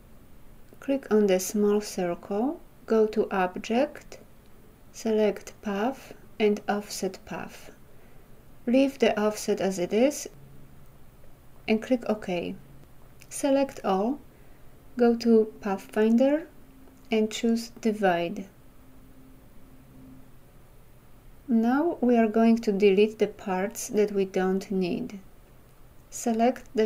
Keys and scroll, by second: 13.7 ctrl+a.